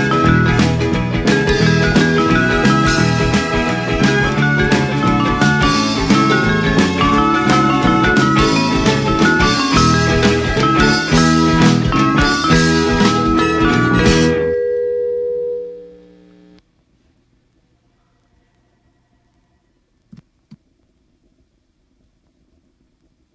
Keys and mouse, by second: 0.2 shift+d, 0.9 z, 1.5 click, 1.9 p, 2.2 click, 3.0 Tab, 3.6 click, 6.2 click, 10.8 click, 12.7 click, 14.7 click, 16.2 click, 18.9 click, 20.9 click, 23.1 middle click.